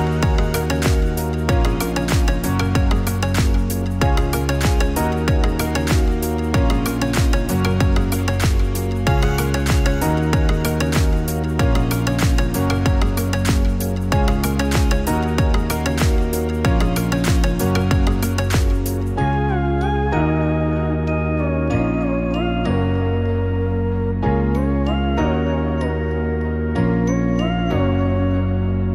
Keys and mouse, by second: 0.0 click, 6.8 click, 8.0 click, 11.4-15.5 drag, 18.2 click, 21.5 alt+shift+click, 23.5-24.5 alt+shift+drag, 25.2 middle click, 25.3 click, 25.5 middle click, 28.2 middle click, 28.5 click.